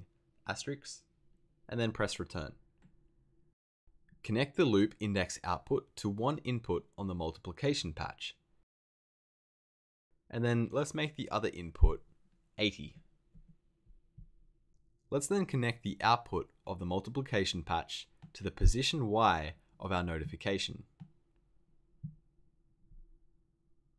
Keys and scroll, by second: 2.3 Return, 3.3 Return, 12.8 8, 13.3 0.